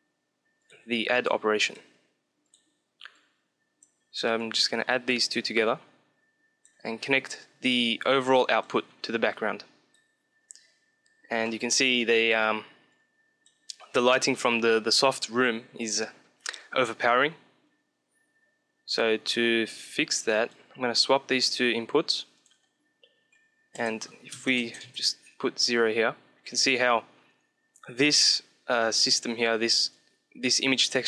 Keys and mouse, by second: 1.5-7.1 drag, 7.3-8.9 drag, 9.2-10.7 drag, 10.7-12.9 middle drag, 12.9-14.5 drag, 17.8-19.4 middle drag, 19.6-21.4 drag, 22.3 click, 29.7-31.0 drag.